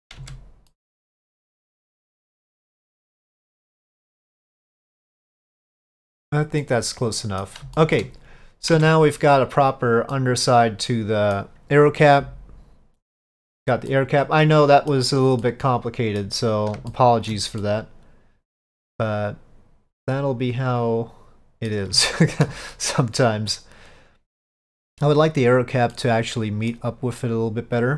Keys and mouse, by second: 0.3 Tab, 0.8-5.9 middle drag, 6.7-7.5 middle drag, 7.8 shift+middle drag, 8.8 Tab, 10.2-11.4 middle drag, 13.5 click, 14.0-15.0 middle drag, 15.5 middle click, 17.0 shift+middle click, 17.7-21.8 middle drag, 22.1 shift+middle click, 22.8-24.8 middle drag, 26.0 middle click, 27.3 click.